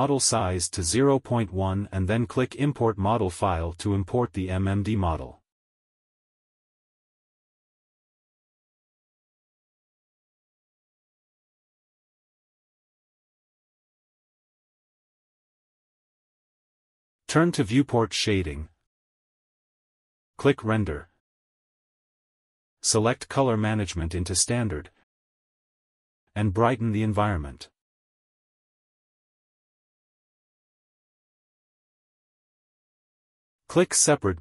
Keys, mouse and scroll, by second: 11.0 middle click, 13.3 click, 14.9 h, 16.5 middle click, 17.5 click, 20.1 click, 20.8-21.4 scroll down 1, 21.4-22.0 scroll down 1, 23.1 click, 23.5 scroll down 2, 24.5 click, 26.4 click, 30.6 middle click, 33.0 click, 33.7 click.